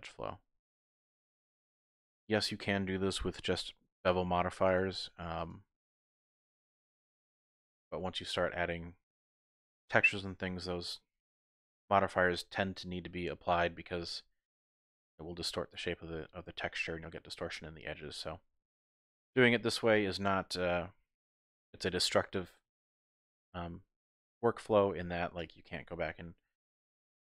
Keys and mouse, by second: 0.6 click, 1.4 shift+click, 3.6 ctrl+r, 4.6 click, 5.0 ctrl+r, 6.1 click, 6.4 middle click, 8.4-9.6 middle drag, 9.8 shift+middle click, 11.1-14.9 middle drag, 17.4-18.8 middle drag, 18.9 Tab, 19.5-23.1 middle drag, 24.7 middle click, 25.4 Tab, 26.8 shift+click.